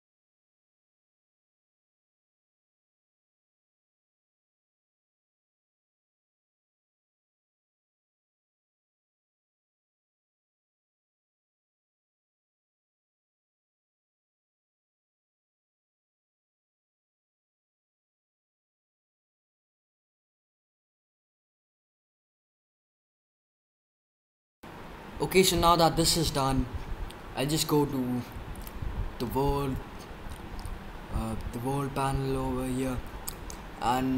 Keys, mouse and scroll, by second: 0.0-2.5 typing, 0.2 drag, 0.5-0.8 drag, 4.1 click, 4.4 middle click, 4.5 click, 4.7 right click, 5.1 drag, 5.1 right drag, 5.3 right click, 5.4 click, 5.8 middle click, 6.0 middle click, 6.3 click, 6.3 right click, 6.7 click, 6.7 middle drag, 6.7 right click, 7.2 middle click, 7.5 middle click, 7.7-9.8 typing, 11.4 click, 11.9 middle click, 12.0 click, 12.0 right click, 12.7 click, 13.2 drag, 13.6 middle drag, 13.6-14.4 scroll down 3, 13.9 middle click, 14.2 middle click, 14.5 middle drag, 14.6-16.6 typing, 14.9-15.5 right drag, 15.6 right click, 16.1 right click, 16.3 right drag, 17.9 click, 18.5 middle click, 18.8 middle click, 19.2 middle click, 19.6 middle click, 20.0 middle click, 20.1-20.5 drag, 21.7 drag, 22.1 drag, 22.1-23.6 typing.